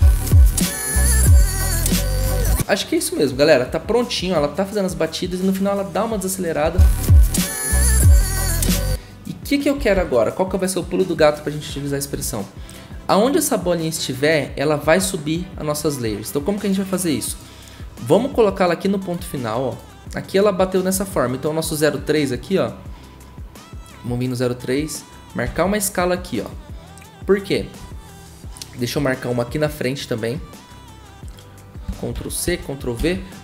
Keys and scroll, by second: 15.5 v, 25.4 s, 32.4 ctrl+c, 33.0 ctrl+v.